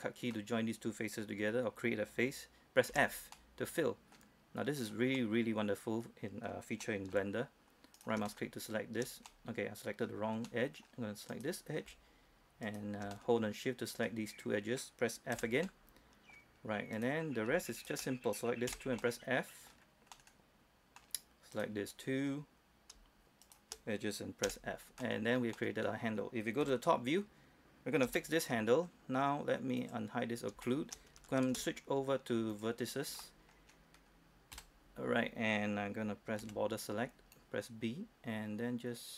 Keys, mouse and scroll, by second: 3.2 f, 3.6 middle click, 5.0 right click, 5.6 middle click, 8.2 shift+right click, 8.5 middle click, 8.6-9.5 scroll up 1, 9.5 middle click, 10.7 scroll up 1, 10.8-11.1 scroll down 1, 11.6 right click, 12.9 shift+right click, 13.4-15.0 middle drag, 15.0-15.3 scroll down 1, 15.6 f, 15.9 middle click, 17.2 right click, 18.0 shift+right click, 18.9 f, 19.3 middle click, 20.1-20.4 scroll down 1, 20.4 middle click, 21.8 right click, 22.1-23.2 scroll down 1, 23.7 shift+right click, 24.7 shift+f, 25.1 scroll down 1, 25.3 middle click, 26.1-26.7 scroll down 1, 26.9 KP_7, 27.4-28.3 scroll up 1, 28.4 shift+middle click, 30.0 click, 30.5-30.8 scroll up 1, 30.9 shift+middle click, 31.7 ctrl+Tab, 32.8 click, 33.2 scroll down 1, 33.5 middle click, 33.9-34.3 scroll down 1, 34.8 KP_7, 36.7 b, 37.6-39.1 drag.